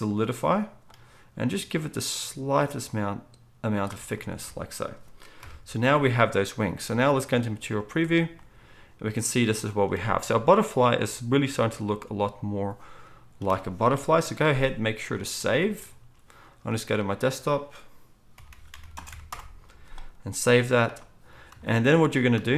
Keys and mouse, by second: 4.4 alt+a, 5.4 KP_1, 6.8 z, 13.9 KP_1, 15.0-21.7 shift+drag, 15.0-22.5 shift+middle drag, 15.0-21.7 shift+right drag, 15.7 ctrl+s.